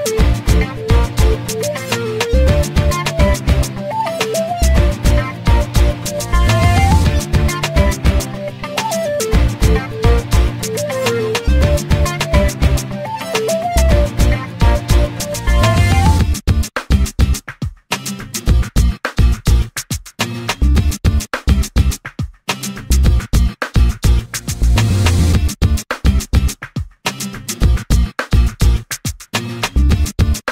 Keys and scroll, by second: 4.3 space, 6.9 m, 12.2 space, 24.1 m.